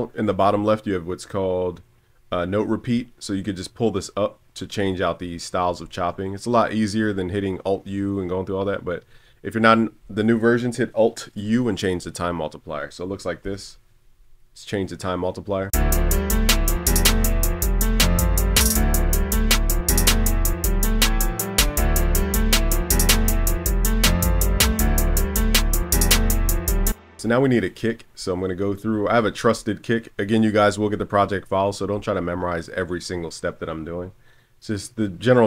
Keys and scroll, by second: 13.4 alt+u, 25.9 super+s.